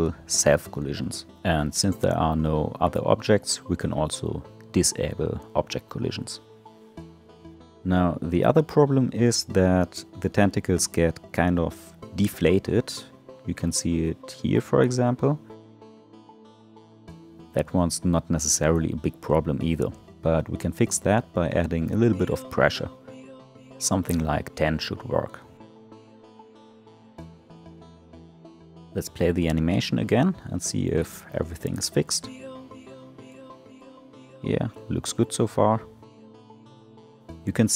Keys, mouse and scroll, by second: 0.0 click, 5.7 click, 11.0-13.8 middle drag, 20.4-21.9 scroll up 6, 21.9 click, 22.7-27.2 drag, 27.7-28.5 scroll down 4, 28.5-29.0 drag, 29.0 space, 29.6-29.9 scroll down 5, 30.3-31.9 middle drag, 31.9 click.